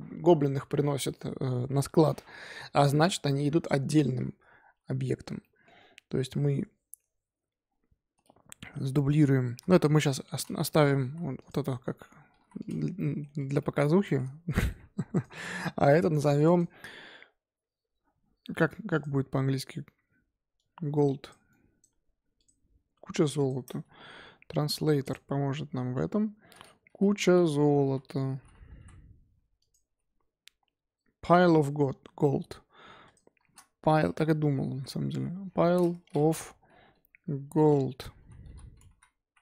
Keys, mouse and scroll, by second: 4.4 scroll up 1, 4.6 z, 5.4-7.6 shift+middle drag, 7.6-9.5 scroll down 2, 9.5 shift+d, 10.7 middle drag, 10.9 g, 12.3 g, 12.9-13.3 middle drag, 13.3 click, 13.6-14.7 middle drag, 14.7-15.1 scroll up 1, 15.1 click, 15.3-16.3 shift+middle drag, 16.3 click, 16.5-19.0 drag.